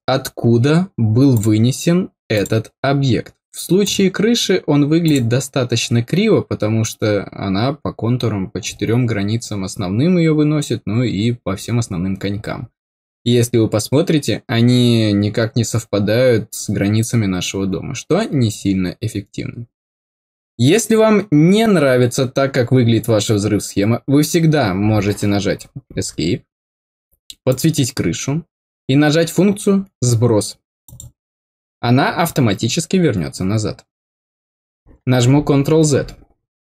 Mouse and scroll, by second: 1.3 click, 2.3 click, 3.7 click, 5.0 click, 12.4 middle click, 27.4 click, 30.8 click.